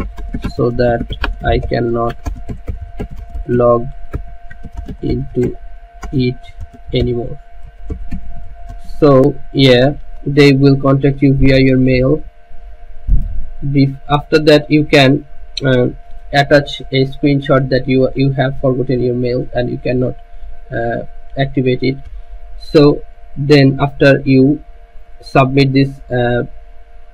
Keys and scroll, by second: 0.0-5.4 typing, 7.3-10.3 typing.